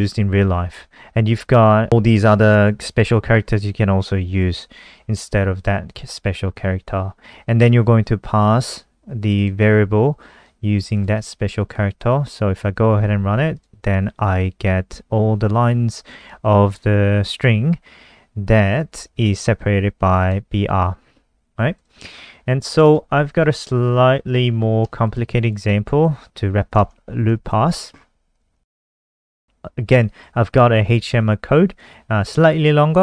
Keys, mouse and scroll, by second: 1.4 click, 2.3 shift+click, 9.4 click, 9.5 click, 10.6 click, 11.3 ctrl+s, 11.6 F5, 13.7 click, 22.3-22.9 scroll down 4, 22.9 click, 23.5 Home, 24.0-25.1 scroll down 5, 25.1 ctrl+c, 25.1 click, 25.6 shift+click, 27.0 shift+Home, 27.5 ctrl+v, 28.1-28.8 scroll up 7, 28.6 click, 32.1 click.